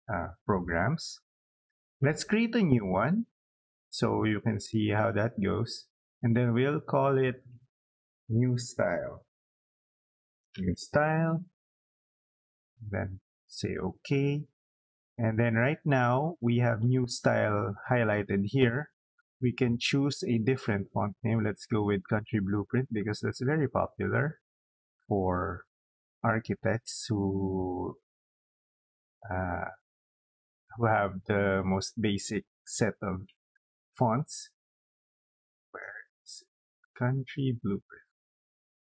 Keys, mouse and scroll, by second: 5.0 click, 8.2 Caps_Lock, 8.5-11.2 typing, 13.0 click, 20.5 click, 22.6-24.4 drag, 26.5-27.2 scroll up 2, 27.8-28.3 scroll up 4, 29.8 scroll down 2, 35.0-35.9 scroll up 6, 37.4-37.9 scroll down 4.